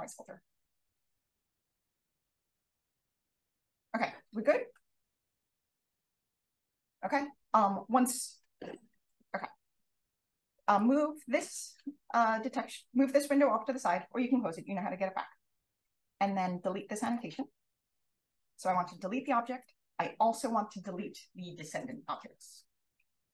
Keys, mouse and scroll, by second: 16.1-17.1 drag, 19.2 click.